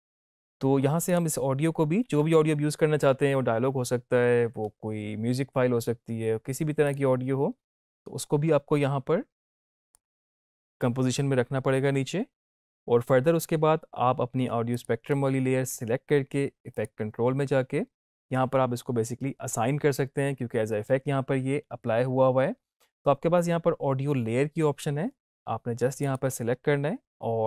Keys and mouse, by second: 1.0 click, 6.8-12.2 drag, 14.7 click, 26.0 click.